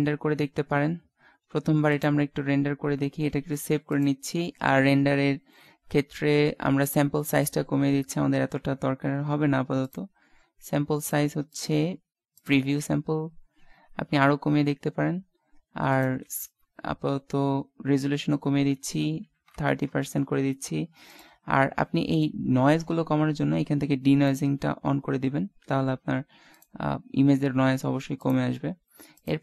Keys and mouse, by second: 0.9-1.9 middle drag, 1.9-3.7 drag, 3.7 ctrl+s, 9.9-13.1 drag, 14.0-17.8 middle drag, 21.1-22.2 drag, 22.2 typing, 24.3 click, 26.1 typing, 26.3 ctrl+s.